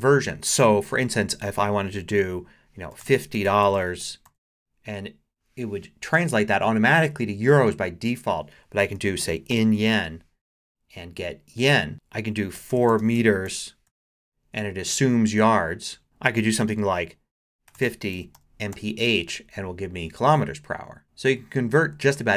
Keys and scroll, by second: 2.7-4.7 typing, 8.7-10.4 typing, 12.3-14.4 typing, 16.0 BackSpace, 17.4-19.2 typing.